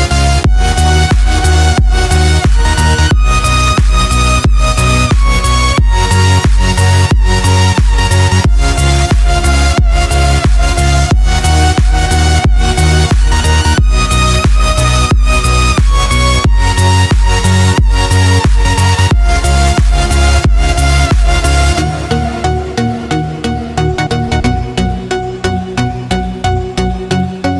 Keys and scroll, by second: 0.2 ctrl+=, 26.9 ctrl+j.